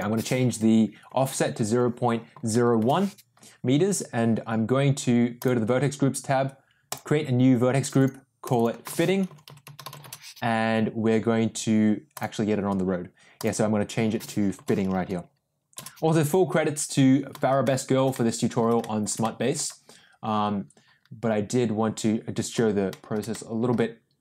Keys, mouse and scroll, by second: 5.3 click, 6.8 click, 8.4 click, 8.5-10.6 drag, 9.6 t, 12.1 click, 13.4-16.2 drag, 17.6-17.9 shift+middle drag, 18.1-18.5 middle drag, 18.7 shift+middle drag, 19.2 middle click, 22.8 shift+middle drag, 23.2-23.6 middle drag.